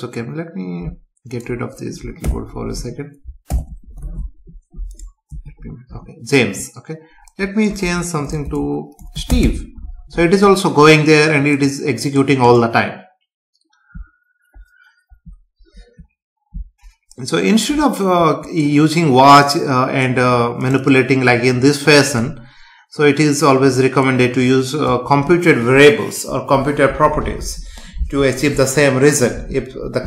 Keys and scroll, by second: 2.2 ctrl+/, 2.7 Up, 3.5 ctrl+/, 4.0 ctrl+s, 5.3 F5.